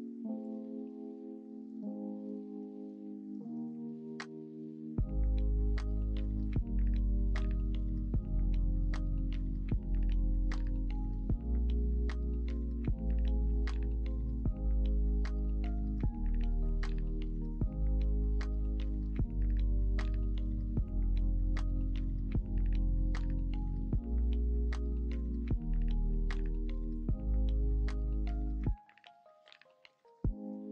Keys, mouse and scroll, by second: 16.6 3.